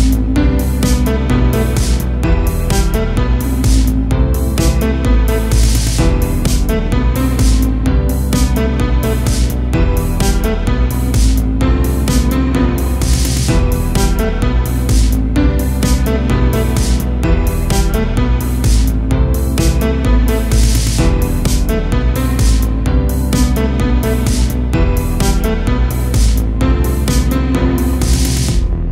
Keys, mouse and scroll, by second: 3.7-5.7 right drag, 5.7-8.7 middle drag, 9.8-13.9 middle drag, 13.9-17.0 drag, 17.4 shift+r, 20.3 ctrl+r, 21.1-22.5 middle drag, 22.5-23.7 drag, 23.7 right click, 25.0-28.3 middle drag, 28.3 KP_Divide.